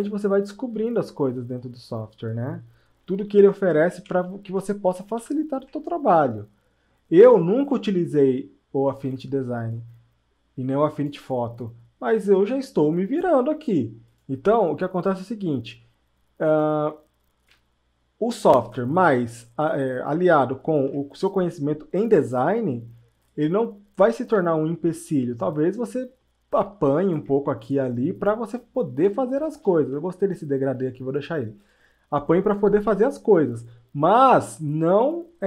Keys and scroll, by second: 3.4 shift+Up, 3.9 shift+Left, 4.4 shift+Left.